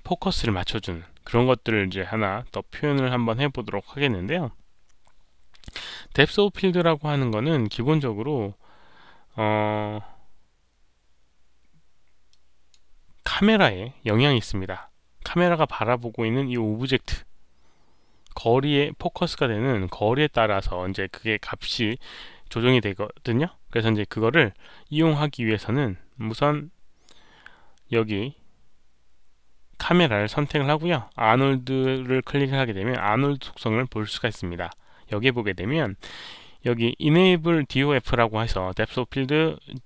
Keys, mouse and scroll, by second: 2.5 scroll down 2, 3.2 scroll down 2, 4.1-4.4 scroll down 2, 6.9 scroll up 1, 7.7-8.4 scroll up 2, 8.8 scroll down 1, 12.2 click, 14.1 click, 20.8 middle click, 21.7 middle click, 23.3 middle click, 23.3 click, 23.7 middle click, 23.7 click, 24.1-24.4 scroll up 1, 24.4 middle click, 28.5 middle click, 31.6 click, 32.9-36.2 middle drag, 39.6 click.